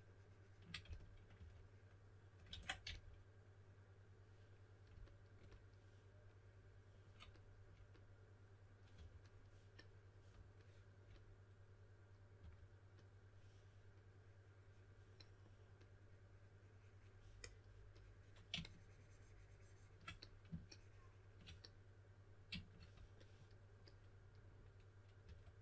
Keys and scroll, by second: 0.8-1.3 typing, 2.8 s, 8.9 3, 12.3 3, 25.2 2.